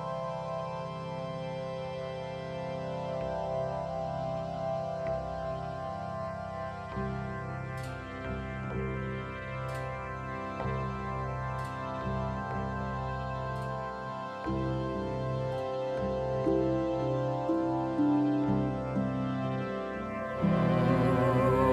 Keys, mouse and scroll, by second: 0.1-6.6 drag, 10.5-21.7 drag.